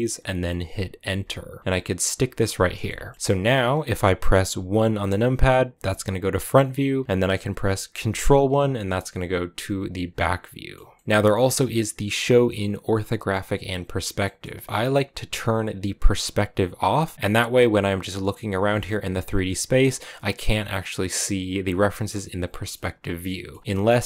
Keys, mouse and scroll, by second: 1.6 g, 2.7 shift+middle click, 3.0-3.5 scroll up 2, 6.3 KP_1, 8.1 ctrl+KP_1, 9.7-10.3 scroll down 3, 10.3 middle click, 11.1-12.6 scroll up 1, 14.1-16.6 middle drag, 16.6 click, 17.0 scroll down 1, 17.1 middle click, 17.5 right click, 18.3 click, 18.6 middle click, 19.3-22.3 right drag, 22.3 click, 22.6 middle click, 23.5 scroll down 3, 23.6-24.0 middle drag.